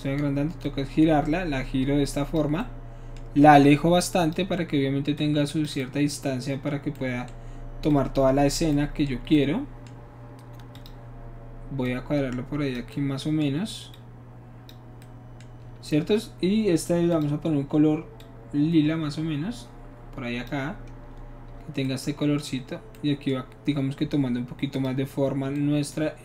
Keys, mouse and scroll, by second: 0.6-2.4 drag, 2.6 middle click, 4.2 click, 5.2 click, 7.9 click, 10.8 click, 11.8 click, 12.9 middle click, 14.0 click, 17.1 click, 18.2-20.5 drag, 24.7 click.